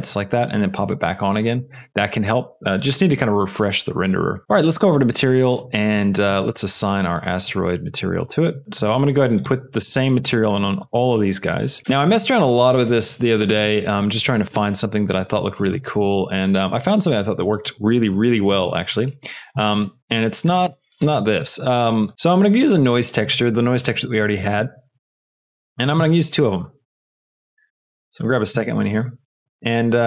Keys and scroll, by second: 25.2 shift+a, 26.8 n, 27.0 i, 27.7 Return.